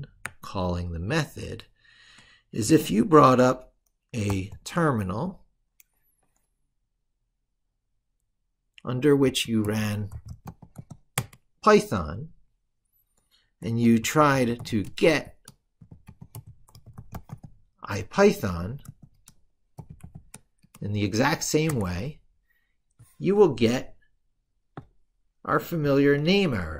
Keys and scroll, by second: 0.1 ctrl+super+Right, 4.0 ctrl+alt+t.